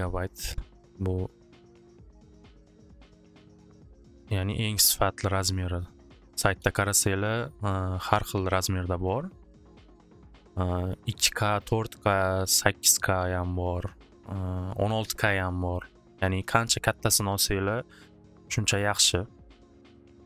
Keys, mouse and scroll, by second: 0.5 click, 0.8 click, 2.3 click, 2.5 click, 3.8 BackSpace, 6.5 BackSpace, 8.7 click, 9.0 click, 9.7 click, 9.9 click, 11.2 click, 11.3 click, 16.3 BackSpace, 17.8 BackSpace, 19.4 click, 19.6 click.